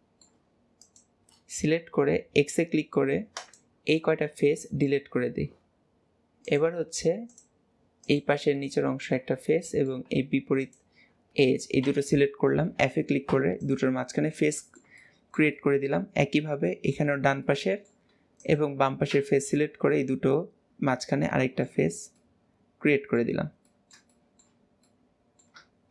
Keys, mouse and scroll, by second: 0.8 shift+click, 1.6 x, 4.0-6.5 middle drag, 6.5 click, 7.3 click, 8.1 click, 8.6-10.6 middle drag, 10.6 shift+click, 11.9 f, 13.6 click, 14.1-18.4 middle drag, 18.4 shift+click, 19.2 f, 19.6 middle click, 21.4 middle click, 21.8 Tab, 22.2-23.3 middle drag, 23.3 Tab, 23.7-25.9 middle drag.